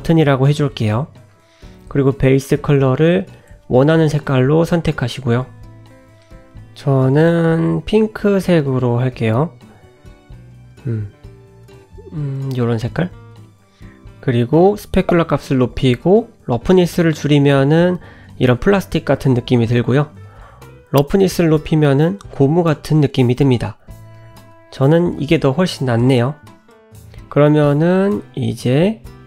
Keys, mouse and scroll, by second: 1.8 click, 14.5 click, 16.0 click, 17.4-19.0 scroll up 5, 19.0 click, 21.5 click, 21.7 scroll down 2, 21.9 middle click, 23.5 click, 23.9 middle click, 24.4 g, 25.6 click, 25.9-26.3 scroll down 2, 26.3 middle click, 27.2-27.7 scroll down 5, 27.8 shift+middle click, 28.9 click.